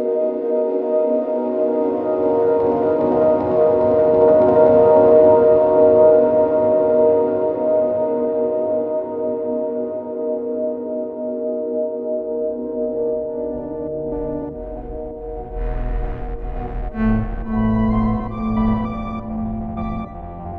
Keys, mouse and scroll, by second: 2.6 ctrl+r, 3.5 Tab, 3.9 alt+v, 5.2 middle click, 8.8-19.9 drag, 8.8-19.9 middle drag, 12.8 alt+v, 17.7 alt+v, 20.3 click, 20.3 middle click, 20.3 right click.